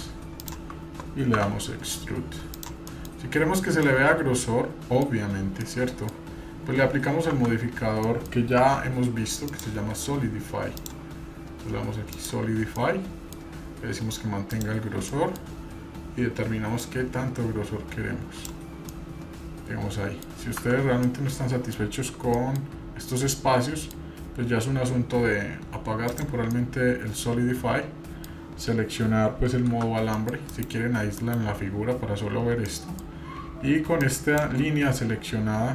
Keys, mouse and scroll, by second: 1.4 e, 2.9 middle click, 3.4-3.9 scroll up 2, 3.8-5.1 middle drag, 5.6 scroll down 1, 5.6 middle click, 7.3 Tab, 8.0 middle click, 8.6 Tab, 9.5 drag, 10.8-12.2 drag, 12.8 middle click, 14.5 click, 15.1 middle click, 16.8-18.6 drag, 18.9-20.2 middle drag, 20.6 Tab, 21.0-21.7 middle drag, 22.3 middle click, 23.2 middle click, 26.1 click, 26.5-28.2 middle drag, 28.3-28.8 scroll up 1, 29.7 shift+z, 30.2 middle click, 30.4 scroll up 1, 31.7-32.6 scroll down 2, 32.6 middle click, 34.0 click.